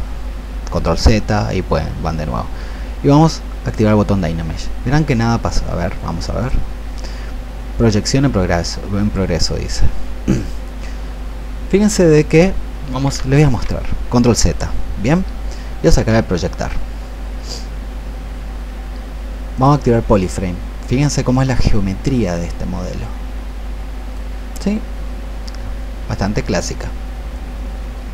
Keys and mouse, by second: 3.5 click, 13.4 ctrl+z, 16.8-28.1 drag.